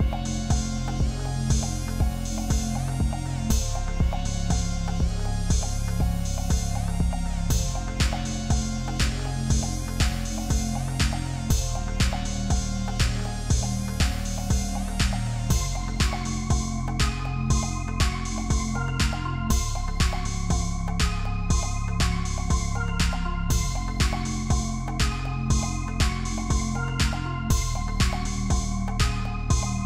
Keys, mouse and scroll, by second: 0.0-6.4 typing, 7.6 typing, 10.0 double click, 14.5 Up, 14.6 Up, 17.5 double click, 29.2 ctrl+click.